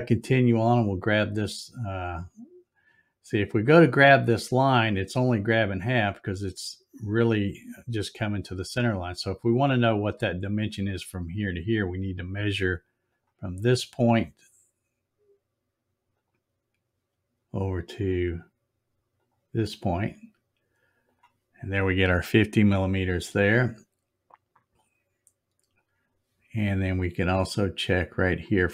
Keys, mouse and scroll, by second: 13.1 click, 16.2 click, 19.1 click, 21.0 click, 24.7-25.7 drag, 28.3 click.